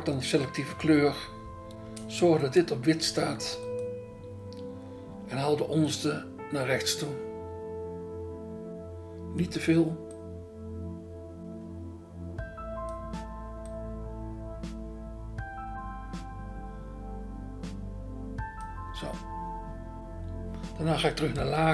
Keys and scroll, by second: 0.8 BackSpace, 2.6 BackSpace, 21.4 BackSpace.